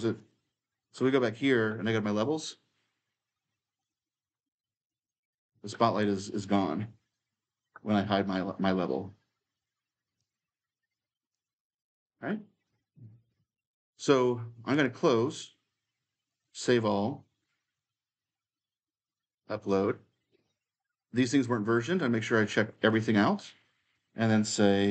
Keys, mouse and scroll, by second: 0.0-2.0 drag, 3.6-5.8 drag, 5.8-9.3 right drag, 6.7 s, 9.3 click, 14.5-17.6 drag, 17.6-18.9 right drag, 18.9-20.9 drag, 22.5-24.9 drag.